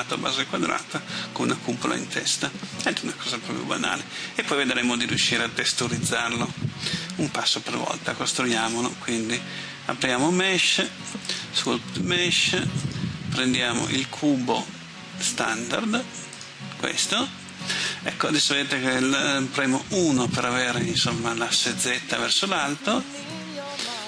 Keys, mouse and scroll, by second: 8.7 space, 11.3 click, 20.0 KP_1.